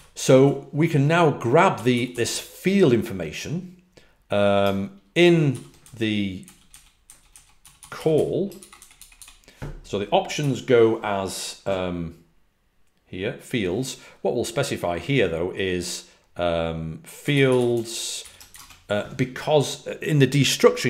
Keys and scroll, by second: 0.0-0.6 typing, 1.7-2.0 typing, 6.4-9.1 typing, 10.3 typing, 16.9-18.1 typing.